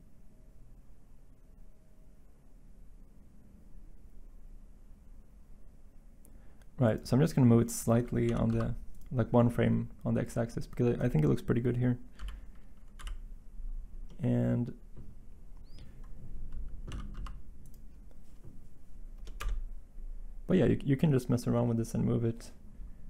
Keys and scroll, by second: 8.2 g, 8.4 x, 12.1 End, 16.9 g, 19.4 Insert.